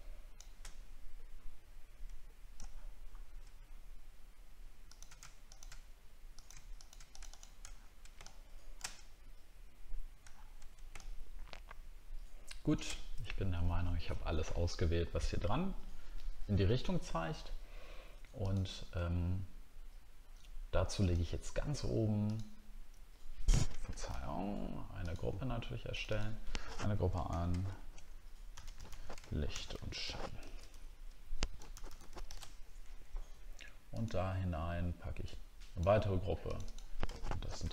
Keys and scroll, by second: 2.7 alt+scroll up 1, 7.7 alt+scroll down 1, 10.3 alt+scroll down 1, 24.1 ctrl+z, 29.1 shift+i.